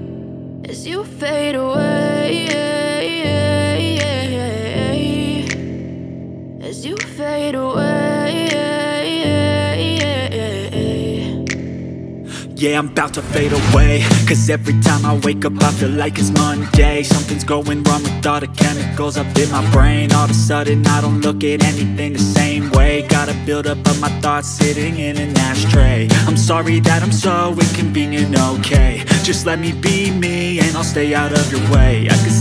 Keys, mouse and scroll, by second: 2.0 shift+click, 2.2 alt+w, 3.1 scroll down 1, 3.4 middle click, 6.2 alt+scroll down 1, 28.6 alt+scroll down 1, 28.7 middle click, 29.0 alt+w.